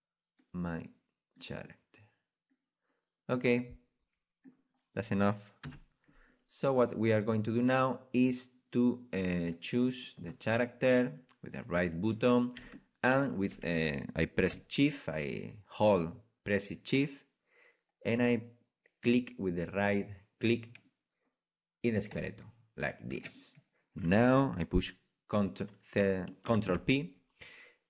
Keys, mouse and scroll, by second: 1.6 right drag, 1.8 right click, 2.0 right click, 2.2 middle click, 2.4-3.5 middle drag, 4.7-7.3 middle drag, 5.6 KP_1, 7.4-9.6 middle drag, 9.6-10.6 drag, 10.6-22.1 middle drag, 22.1 right click, 22.4-27.8 right drag.